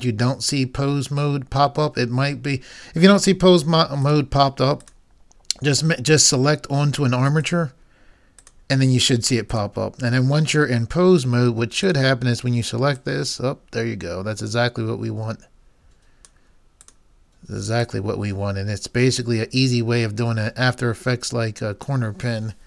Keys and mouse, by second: 4.4-6.7 drag, 7.5-9.6 drag, 11.9-13.5 right drag, 13.5-15.0 drag, 16.8-19.6 drag.